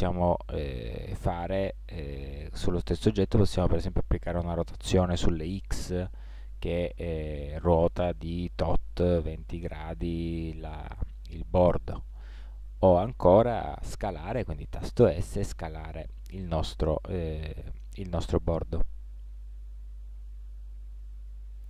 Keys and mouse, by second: 3.7 r, 10.8-12.5 middle drag, 12.8-14.3 middle drag, 14.4 s, 19.0 middle click, 19.6-21.6 middle drag.